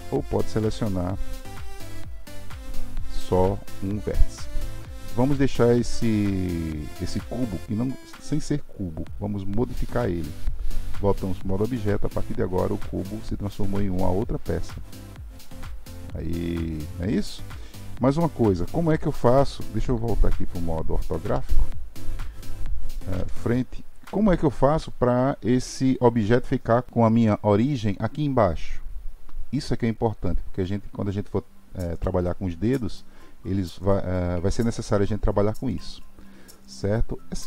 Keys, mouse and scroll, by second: 1.3 click, 3.3 g, 11.3 Tab, 11.9-14.9 middle drag, 21.2 KP_5, 26.9 click.